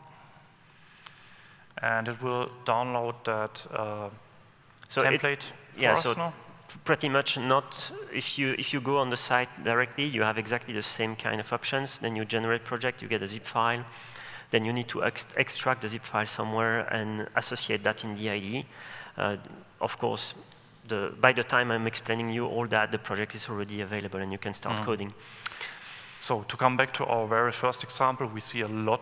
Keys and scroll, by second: 21.3 super+1.